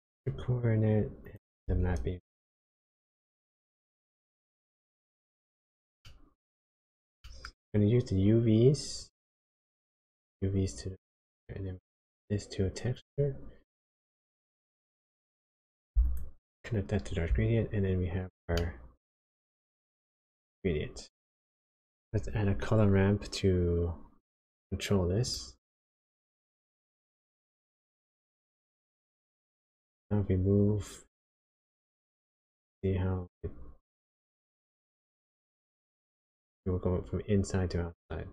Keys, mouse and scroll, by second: 1.6 shift+a, 6.0 middle click, 6.8-7.3 scroll up 2, 7.3 middle click, 9.0 click, 13.6 click, 16.2 ctrl+shift+click, 18.5 middle click, 22.2 shift+a, 31.3 click.